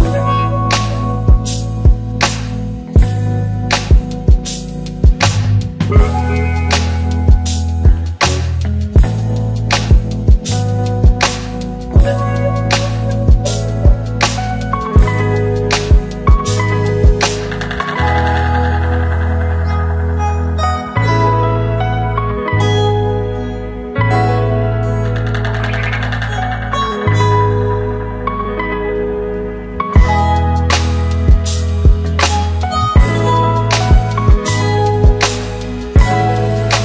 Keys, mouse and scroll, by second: 2.3-6.3 click, 10.4 ctrl+d, 12.8 Right, 14.6 Left, 14.8 click, 18.5 Return, 20.1 click, 20.5 ctrl+d, 21.8 Right, 25.9 click, 27.5 Return, 28.4 click, 28.9 d, 29.4 shift+Right, 30.2 Left, 32.3 click, 33.7 Return, 34.6 click, 35.2 shift+click.